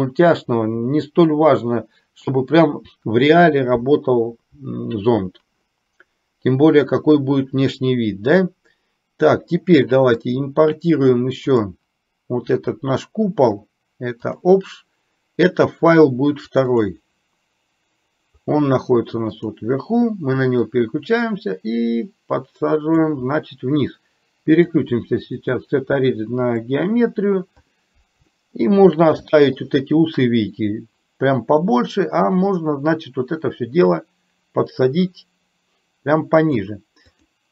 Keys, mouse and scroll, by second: 14.5 click, 20.9-23.1 drag, 24.6-26.6 drag, 28.4 shift+middle click, 29.4 shift+middle click, 30.6 click, 33.9-36.7 drag.